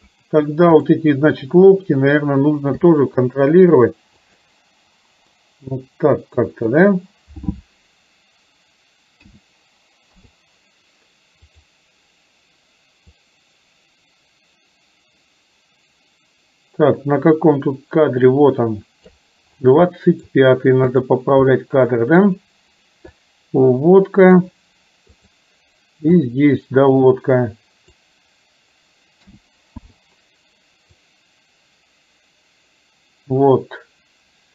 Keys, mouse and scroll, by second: 0.8 click, 3.0 g, 5.5-6.8 middle drag, 9.3 a, 10.2 i, 11.6 click, 13.3-19.3 drag, 20.0-20.3 middle drag, 21.6-22.2 middle drag, 23.2-24.5 drag, 25.3 click, 26.3-28.2 drag, 29.3 a, 29.8 i, 31.1-34.5 drag.